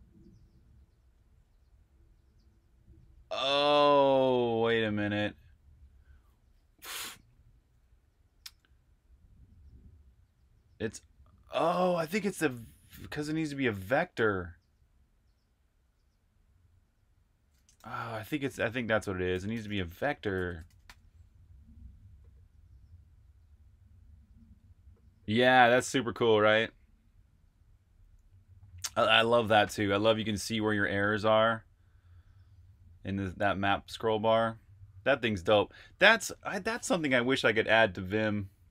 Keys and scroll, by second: 17.7 shift+super+f, 18.1-20.9 typing.